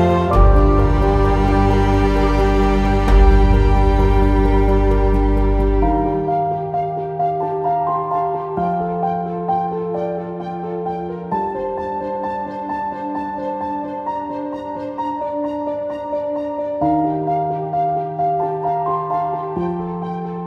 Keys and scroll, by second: 14.5 w, 18.2 q.